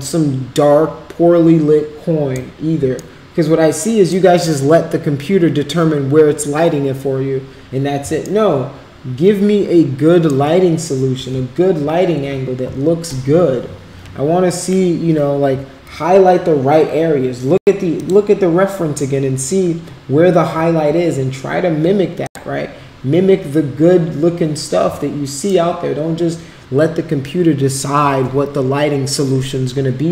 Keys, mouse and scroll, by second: 3.1-4.2 shift+right drag, 8.3-10.3 shift+right drag, 18.0 click, 25.4-27.9 shift+right drag.